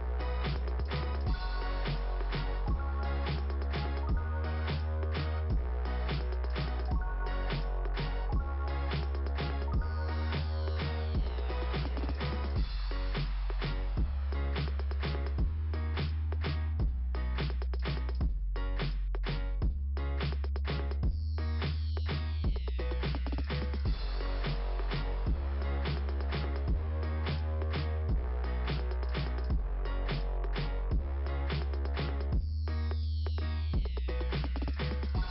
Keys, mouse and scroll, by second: 4.1 click, 4.3 click, 6.4 click, 13.5 right click, 14.8 click, 15.7 right click, 16.8 click, 20.6 click, 21.7 click, 25.3 scroll down 2, 26.8 click, 27.7 click, 29.0 click, 31.0 click, 31.9 click, 32.6 click, 34.0 click.